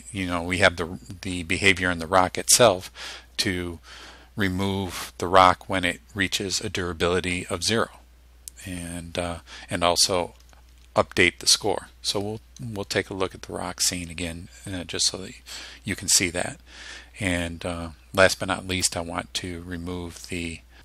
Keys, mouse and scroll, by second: 18.9-20.8 drag.